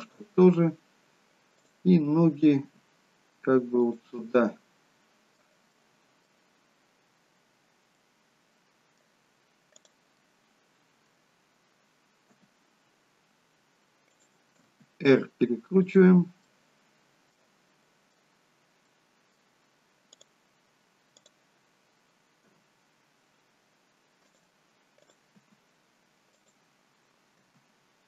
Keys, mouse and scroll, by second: 2.3 click, 2.8 g, 4.4 middle click, 5.9 middle click, 7.0-8.0 scroll up 1, 8.0 middle click, 8.0-9.8 scroll up 1, 9.8 click, 10.3 middle click, 12.4 g, 14.8 r, 16.5 middle click, 18.0 middle click, 20.2 click, 21.2 click, 22.5 g, 25.0 click, 25.6 g, 26.7-27.5 scroll down 2, 27.5 r.